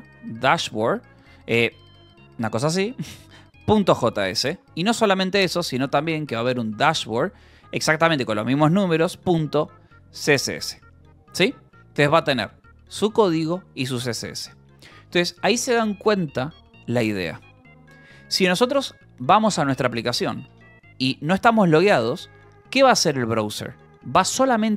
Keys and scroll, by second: 0.0-13.2 typing, 13.0 Escape, 13.9 Escape, 21.3 j, 22.0 k.